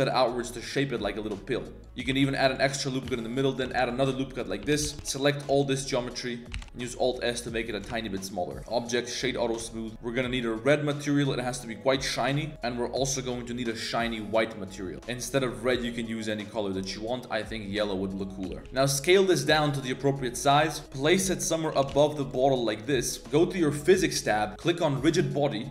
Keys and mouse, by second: 1.8 ctrl+z, 1.8 3, 2.1 ctrl+r, 2.9 click, 3.1 1, 3.3 click, 3.7 ctrl+r, 4.6-5.5 typing, 5.6 click, 6.6 alt+s, 7.9 Tab, 8.1-9.2 drag, 9.6 Tab, 12.1 click, 14.0 click, 14.9 Tab, 14.9 shift+s, 18.5 shift+s, 18.6 Tab, 20.8 g, 21.0 g, 21.5 middle click, 21.7 g, 22.4 middle click, 22.6 g, 22.9 middle drag, 23.8 click, 25.0-25.7 drag.